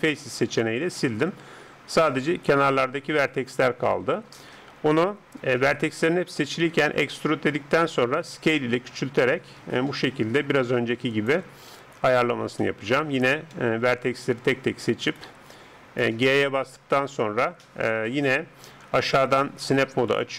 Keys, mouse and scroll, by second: 3.5-5.6 drag, 4.1 a, 6.8 e, 8.1 s, 11.8-15.1 middle drag, 15.1 right click, 16.2 g, 20.1-20.3 drag.